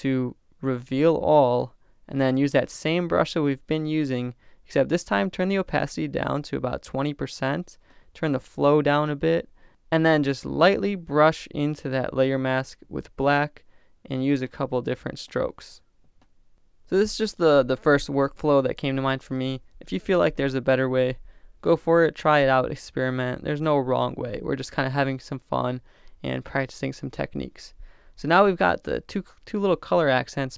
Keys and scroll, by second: 15.9 [, 16.2 ], 16.4 [, 16.6 super+z, 16.7 super+z.